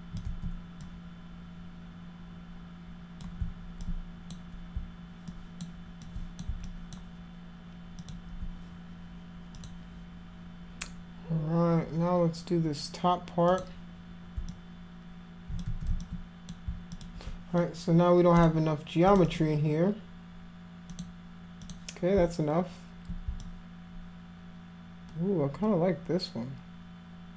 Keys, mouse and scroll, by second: 0.3 ctrl+z, 0.8-3.2 drag, 3.8 click, 5.3 alt+click, 6.0 alt+click, 6.7 alt+click, 8.0 alt+click, 9.6 click, 13.5 click, 14.5-15.6 alt+drag, 15.7 ctrl+z, 16.0 alt+click, 17.0 alt+click, 18.4 click, 19.1 click, 19.3 click, 20.9 click, 21.7 click, 23.4-27.3 alt+drag.